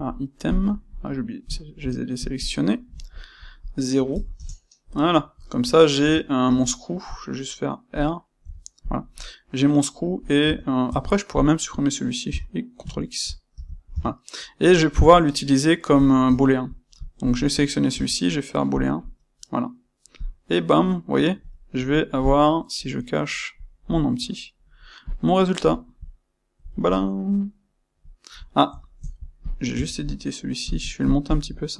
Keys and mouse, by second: 1.0-2.4 middle drag, 2.4 shift+click, 3.3-4.9 drag, 4.4 KP_Enter, 4.9-8.8 middle drag, 5.9 Tab, 6.4 space, 8.8 click, 9.4-11.2 middle drag, 10.4 Tab, 11.2 click, 13.9 Tab, 14.8 KP_Divide, 15.3-17.2 middle drag, 17.2 shift+click, 17.8 space, 20.2 click, 20.4-23.5 middle drag, 23.5 click, 24.1-25.0 middle drag, 25.0 click, 25.2-29.4 middle drag, 29.4 click, 29.7 Tab, 30.6 click, 31.0 shift+click, 31.2 shift+click.